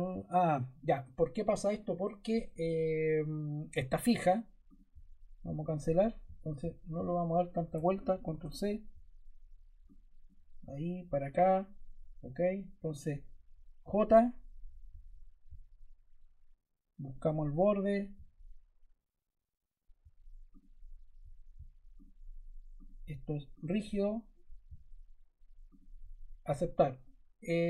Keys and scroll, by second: 7.6 super+Caps_Lock, 7.9 super+c, 8.1 super+v, 13.7 j.